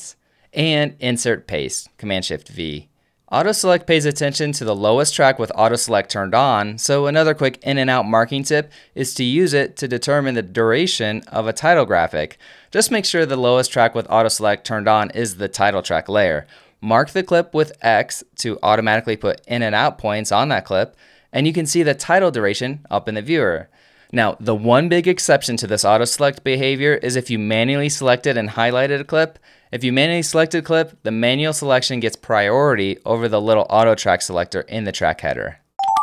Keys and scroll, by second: 1.2 shift+super+Home, 1.3 shift+super+v, 16.3 alt+F1, 17.8 x, 19.3 alt+/, 22.7 space, 29.9 f.